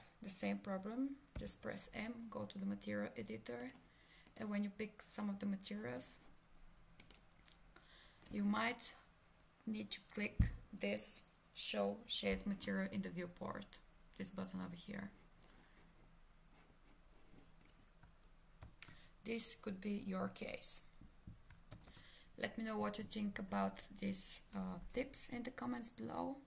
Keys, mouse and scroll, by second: 1.3 m, 3.6 click, 7.0 click, 18.6 ctrl+space, 21.7 ctrl+space.